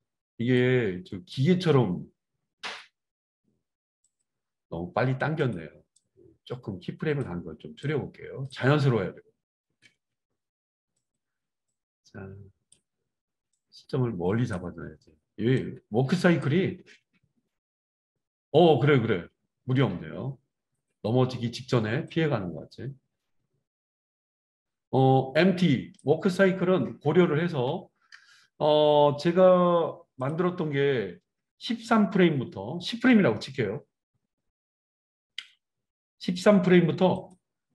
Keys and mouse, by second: 0.6-4.3 drag, 1.5 space, 2.9 space, 4.3-5.4 middle drag, 5.4 click, 5.5 middle click, 5.9-10.0 drag, 8.6 space, 9.9 space, 10.0-11.1 right drag, 11.1 middle click, 11.6-13.9 right drag, 13.9-37.7 drag, 16.7 space, 27.5 space.